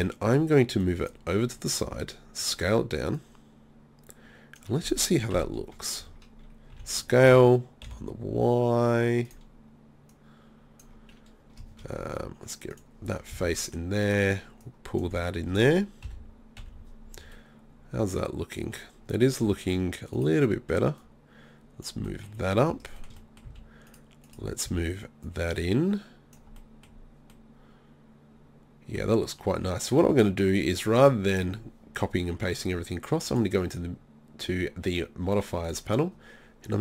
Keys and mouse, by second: 0.8-1.9 drag, 1.9 s, 2.2 click, 2.5-5.1 drag, 5.4 KP_3, 6.8 s, 9.4-16.2 drag, 13.4 z, 14.1-16.0 right drag, 15.1 z, 16.1 KP_1, 16.6 KP_3, 21.0 middle click, 21.9 click, 22.1 middle click, 22.6 click, 23.5 z, 23.9-25.3 drag, 24.7 z, 26.6 middle click, 27.5 middle click, 33.3-36.8 drag.